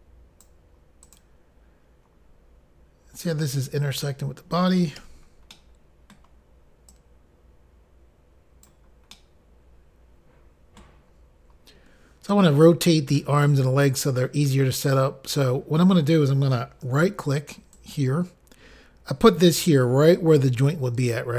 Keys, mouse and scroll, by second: 0.2 click, 1.2 click, 1.3 click, 5.7 middle click, 5.7 i, 7.1 click, 9.3 middle click, 18.0 shift+right click, 19.8 shift+right click.